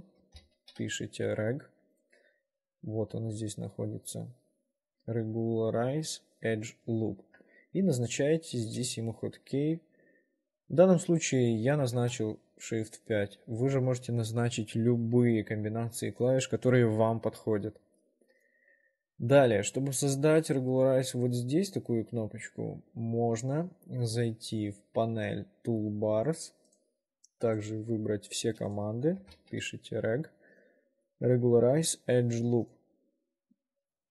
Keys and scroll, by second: 0.1-1.4 typing, 12.0 shift+5, 29.1-30.3 typing.